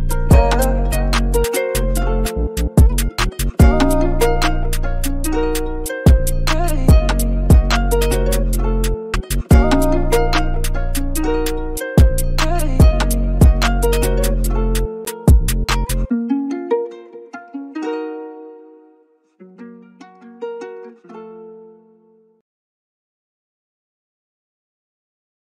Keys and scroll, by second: 6.1 super+t, 12.3-14.3 typing, 20.3 super+z.